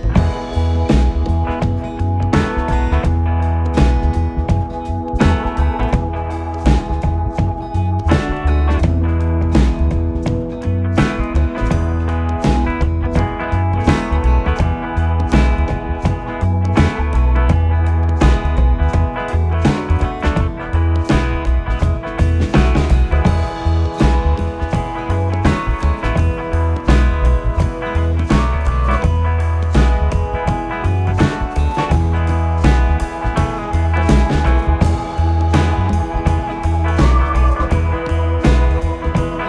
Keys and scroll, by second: 1.1 4, 1.7 1, 3.7 4, 4.2 1, 6.0 Delete, 8.2 4, 11.0 3, 13.3 ], 16.0 0, 16.1 1, 16.2 Return, 16.8 4, 19.4 3, 20.5 ], 21.9 ctrl+z, 22.2 ctrl+z, 22.9 ], 26.5 4, 29.7 ], 31.3 ], 35.2 4, 35.7 3, 36.1 ], 37.3 4.